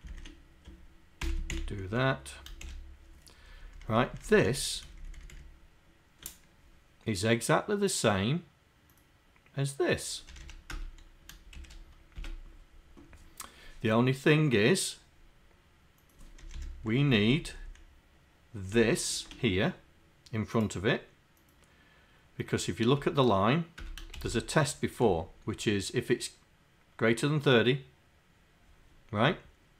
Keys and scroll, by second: 1.2 ctrl+Insert, 1.5 Delete, 3.4 Up, 3.7 Up, 4.3 Up, 4.5 Up, 5.4 shift+Down, 10.4 Home, 10.7 Return, 12.1 Return, 16.4 Home, 17.1 shift+Down, 17.6 shift+Down, 18.7 shift+Up, 24.1 shift+Insert.